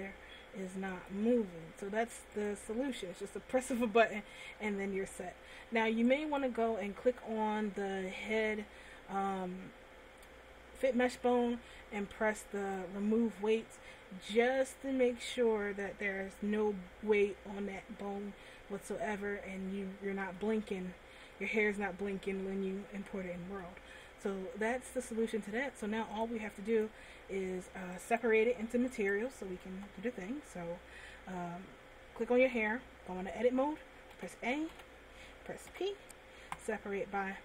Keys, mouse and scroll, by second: 1.9 click, 2.6 click, 6.6 right click, 12.8 click, 19.1 middle click, 21.2-21.5 scroll down 1, 21.5 middle click, 24.3 middle click, 26.3 click, 28.5 right click, 29.4 right click, 30.1 Tab, 34.5 a, 35.0 a, 36.0 p.